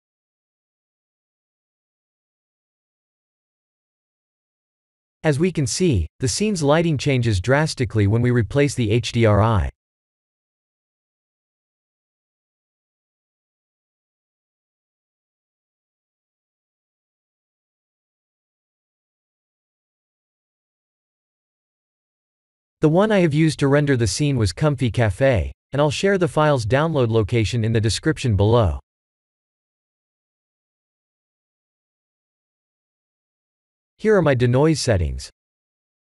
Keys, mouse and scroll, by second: 0.4 click, 4.9 click, 11.0 click, 14.7 click, 32.7 click.